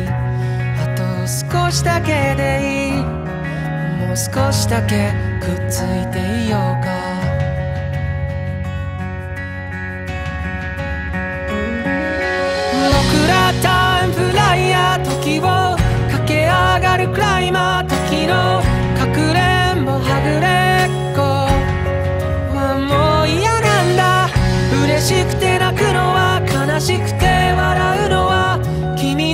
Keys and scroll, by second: 2.6 ctrl+z, 8.9 ctrl+z, 15.3 ctrl+z, 18.1 ctrl+z, 18.8 ctrl+z, 19.2 ctrl+z, 21.6 ctrl+z, 24.1 ctrl+z, 26.2 ctrl+z, 28.6 ctrl+z.